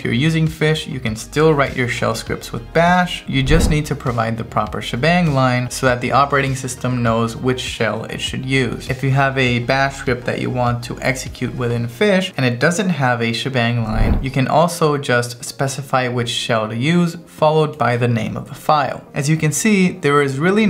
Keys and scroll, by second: 13.9-14.9 typing.